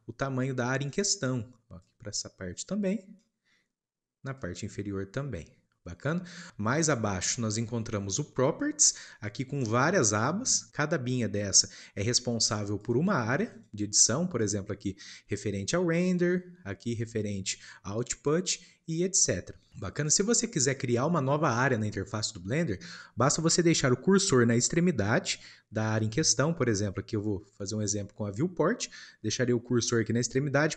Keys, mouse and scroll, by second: 4.4 click, 5.8-30.7 drag.